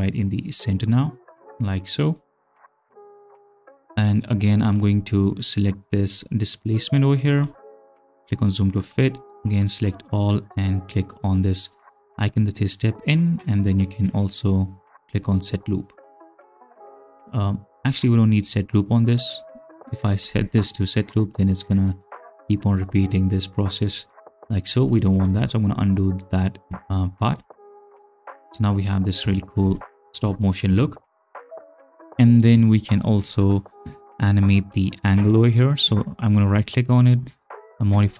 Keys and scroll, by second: 20.2 space, 24.8 space, 25.3 ctrl+z, 27.4 space, 29.6 space.